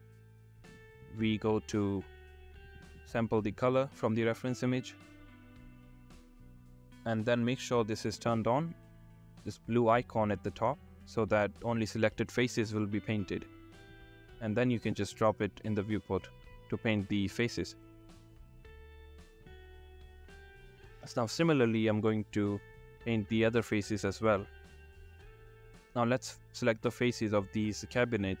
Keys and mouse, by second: 0.9 click, 2.8 click, 6.7 click, 6.9 click, 7.9 click, 11.0 shift+middle click, 14.5 shift+middle click, 17.4 shift+middle click, 18.0 click, 19.6 click, 21.4 shift+middle click, 25.7 shift+click, 28.3 shift+click.